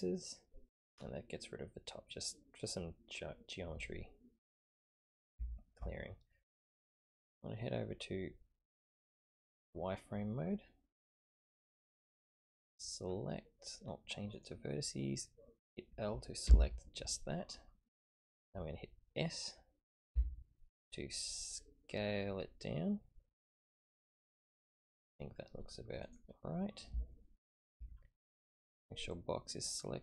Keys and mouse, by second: 1.9 drag, 2.1-2.7 middle drag, 5.3 ctrl+KP_3, 9.1 click, 14.3 click, 16.4 l, 20.1 s, 27.1 shift+middle click, 29.5 click.